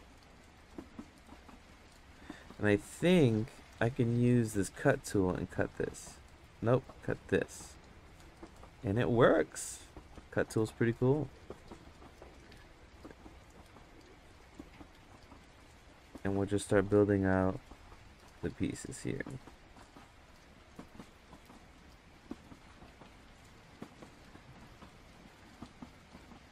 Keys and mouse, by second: 5.4 click, 6.4 ctrl+z, 7.0 click, 11.0-12.0 drag, 12.2 ctrl+z, 12.9 click, 13.8 ctrl+z, 14.2-16.1 drag, 19.2-21.0 drag, 21.2 ctrl+z, 21.6-22.9 drag, 24.5 ctrl+z.